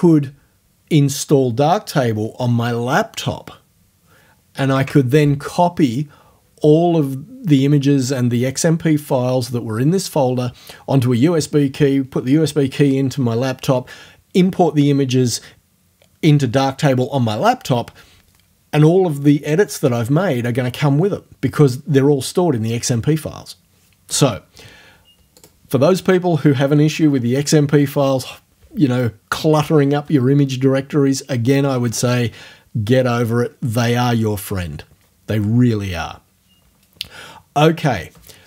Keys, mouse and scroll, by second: 4.8 alt+Tab, 25.4 click.